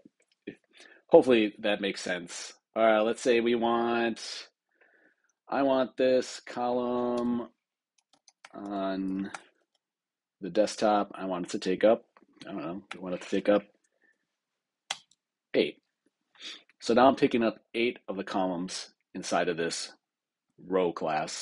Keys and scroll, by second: 7.0 super+Return, 13.9 Down, 14.8 Return.